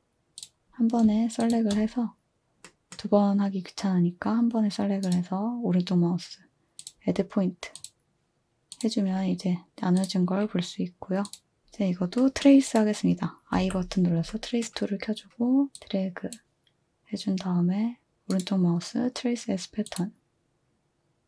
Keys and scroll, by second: 13.5 i.